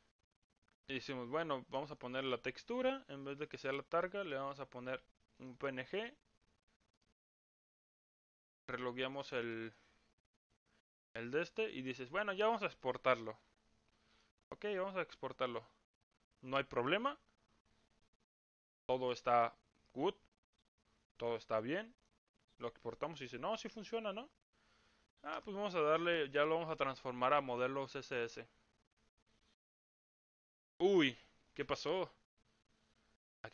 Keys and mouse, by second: 3.5 click, 7.4 click, 9.3 click, 22.0 click, 25.7-33.5 drag.